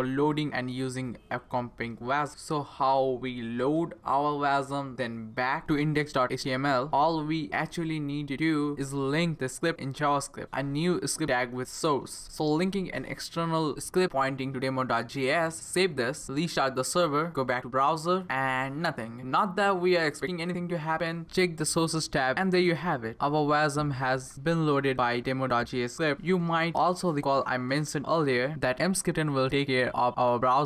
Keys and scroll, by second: 7.7-10.2 typing, 13.2 Up, 14.0 Return.